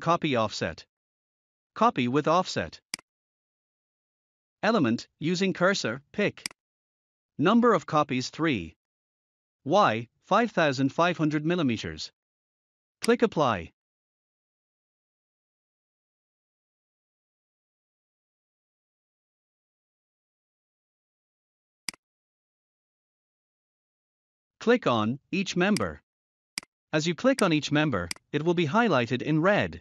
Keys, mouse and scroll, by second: 2.8 click, 4.0 0, 6.3 click, 8.7 3, 13.0 click, 15.9-17.0 typing, 19.7 scroll down 1, 21.7 click, 25.6 click.